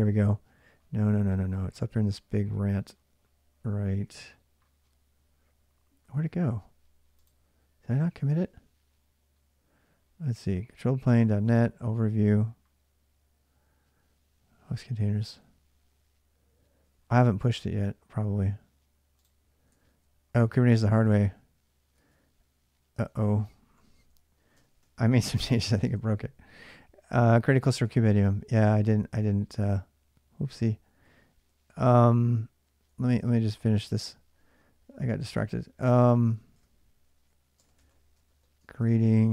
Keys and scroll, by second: 17.2 alt+Tab, 19.5 alt+Tab, 21.7 alt+Tab, 22.7 alt+Tab, 24.2-26.2 typing, 25.7 ctrl+[, 27.6-35.6 typing, 36.3 Return, 36.8-39.3 typing.